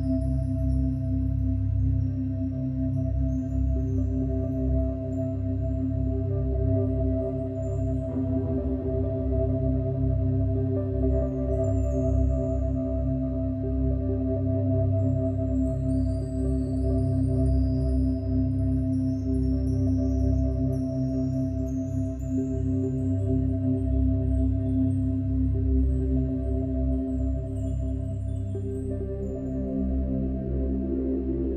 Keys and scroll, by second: 2.7 ctrl+e, 3.1 F2, 3.2 ctrl+t, 6.4 ctrl+x, 6.8 Up, 6.9 Down, 7.2 Up, 23.6 %.